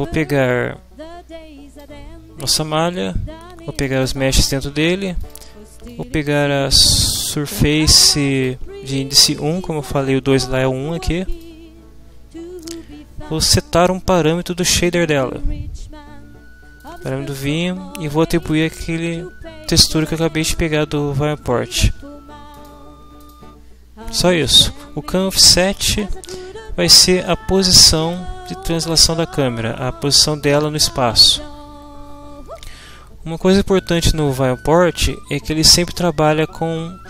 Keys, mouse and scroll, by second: 0.4-2.0 drag, 3.7 middle click, 3.7-4.2 scroll up 2, 4.2 click, 5.8-8.6 middle drag, 5.8-8.6 scroll up 2, 8.6 click, 12.6-14.4 scroll up 2, 16.8 click, 18.3-18.8 scroll up 2, 18.8 click, 19.9 click, 22.5 click, 23.2 scroll up 2, 24.5 click, 27.3-29.2 drag.